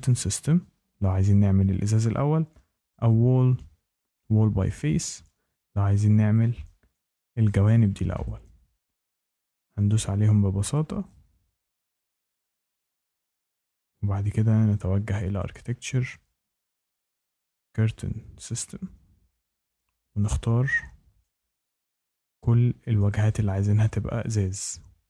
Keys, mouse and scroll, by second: 3.0 click, 4.2 click, 6.8 shift+middle click, 8.2 click, 9.6 shift+middle click, 10.7 click, 11.7 shift+middle click, 12.7 click, 15.3 click, 18.4 click, 20.1 click, 21.1 shift+right click, 22.0 click, 22.9 shift+middle click, 23.8 click.